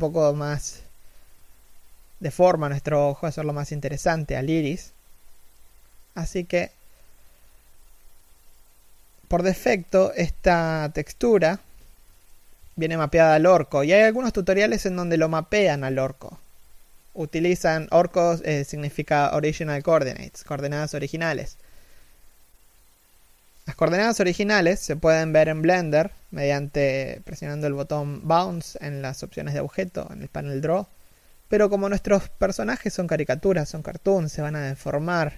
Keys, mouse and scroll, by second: 8.9-9.4 scroll up 2, 9.0 alt+z, 9.7 shift+middle click, 11.1 KP_1, 11.5-21.6 scroll down 1, 25.7-26.1 scroll down 1, 26.3 middle click, 26.8 KP_1, 32.5 s.